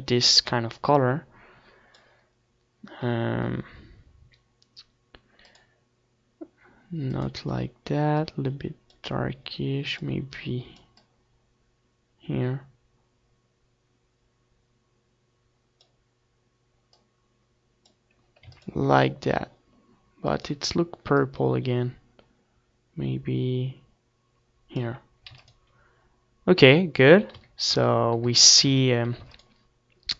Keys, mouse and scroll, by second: 2.7-5.3 middle drag, 5.5-8.8 drag, 18.4 ctrl+s, 20.2-22.0 drag, 25.3 ctrl+s, 27.2 a, 27.5 a, 28.3 a, 28.7 a, 29.2 ctrl+s.